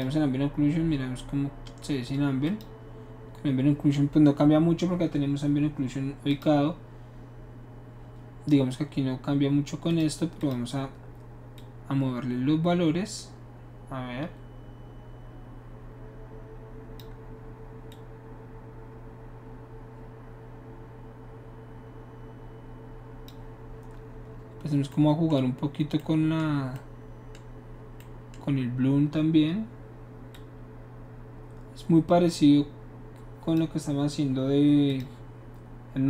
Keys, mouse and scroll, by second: 2.5 click, 6.3 click, 9.9 click, 10.4 click, 11.5-17.0 drag, 17.9-23.3 drag, 24.3 middle click, 30.3-33.5 drag, 34.9 click.